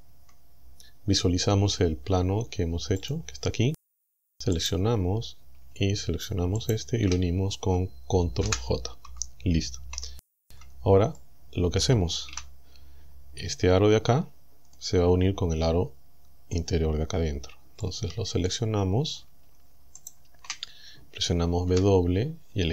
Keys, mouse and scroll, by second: 0.1 Tab, 3.1 click, 4.6 right click, 6.6 shift+right click, 8.5 ctrl+j, 10.5 Tab, 11.2 click, 12.3 z, 12.8-13.1 scroll up 1, 14.7-16.7 middle drag, 17.8 scroll up 1, 18.0 middle click, 20.0 alt+shift+right click, 21.7 w.